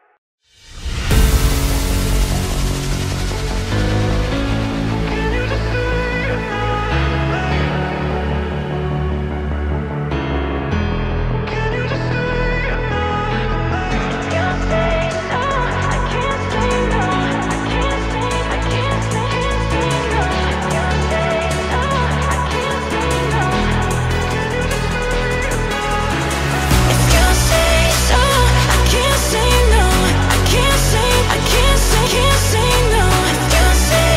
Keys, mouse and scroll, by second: 0.6 click, 2.2 i, 6.1 click, 6.5 g, 8.6 scroll down 1, 8.6 middle click, 9.5 Tab, 9.8 KP_1, 11.2 r, 16.0 click, 16.4-19.4 drag, 19.6-20.7 drag, 20.7-22.2 right drag, 22.2 s, 24.7 click, 25.1-25.9 shift+middle drag, 25.9 click, 27.2 click, 28.0 middle click, 28.5 KP_1, 29.6-31.4 drag, 31.4 Tab, 31.9-32.9 middle drag, 32.9 alt+click.